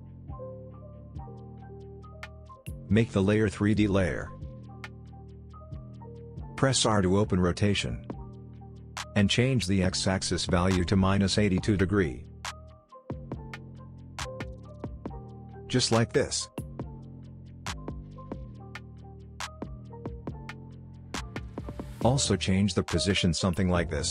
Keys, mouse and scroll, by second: 0.4-1.6 scroll down 1, 3.6 click, 6.8 r, 9.3-10.8 drag, 16.2 Return, 19.6 shift+p, 23.5-24.1 drag.